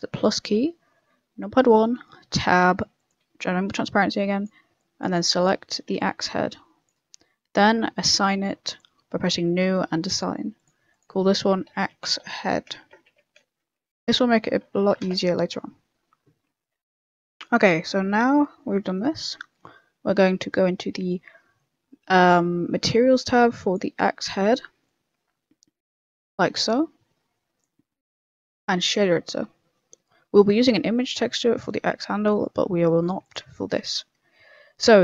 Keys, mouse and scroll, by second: 0.1 click, 1.3 KP_1, 2.2 Tab, 2.9 click, 3.5 b, 4.7 b, 5.9 c, 8.0 click, 8.6 click, 10.5 click, 10.9 click, 17.2 Tab, 17.5 click, 17.9 middle click, 18.1-18.4 scroll down 3, 18.4 middle click, 18.8 middle click, 19.1 shift+middle click, 19.4 middle click, 19.7 shift+middle click, 23.2 click, 24.4 click, 25.8 click, 28.1 click, 29.3 n, 29.7 middle click, 30.1-30.8 scroll up 2, 32.6-33.0 scroll up 6, 33.2 click.